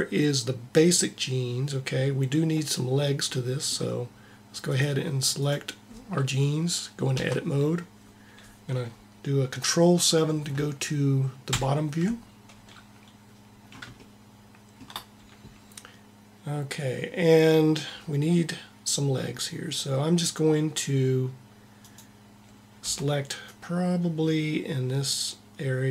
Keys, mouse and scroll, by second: 4.6-7.0 drag, 7.0 Tab, 11.4 ctrl+KP_7, 22.8 c, 23.4 c.